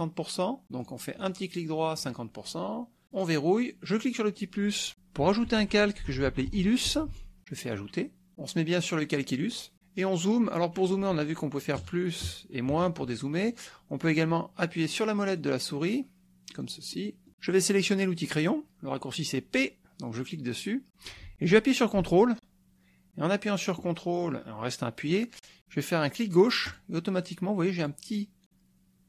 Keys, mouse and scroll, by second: 0.9 click, 1.2 right click, 1.6 middle click, 2.0 click, 3.1 click, 4.1 click, 5.8-7.6 typing, 8.8 click, 11.8 KP_Add, 12.7 KP_Subtract, 14.8-16.1 drag, 16.5 click, 16.9 click, 20.2 click, 26.7 ctrl+click, 27.8 ctrl+click.